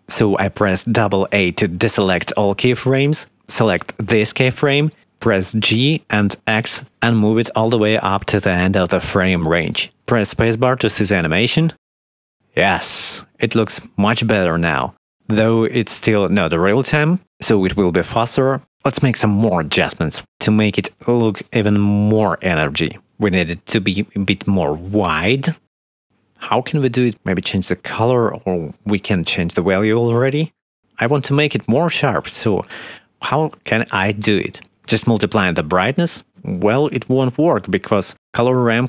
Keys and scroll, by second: 1.6 shift+Right, 2.6 alt+a, 3.6 b, 5.2 g, 5.3 x, 9.2 space, 17.2 space, 17.9 ctrl+s, 36.3 5, 37.5 3, 38.3 ctrl+z.